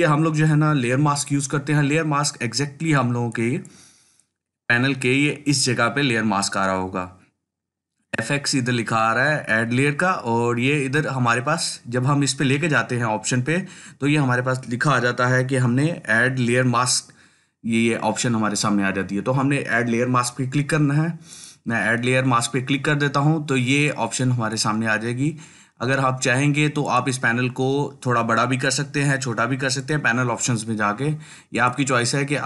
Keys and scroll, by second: 0.1 ctrl+alt+z.